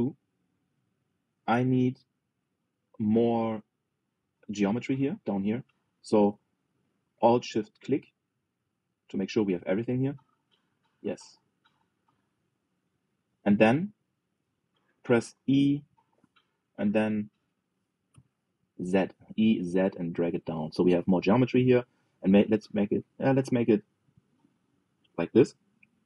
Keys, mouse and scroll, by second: 1.7 middle click, 2.4 click, 3.1 Tab, 4.5 click, 6.6 alt+shift+click, 8.0-9.4 middle drag, 9.4 alt+z, 9.6-12.6 middle drag, 12.6 alt+z, 12.9 middle click, 13.4 scroll up 1, 13.7-16.1 middle drag, 16.1 e.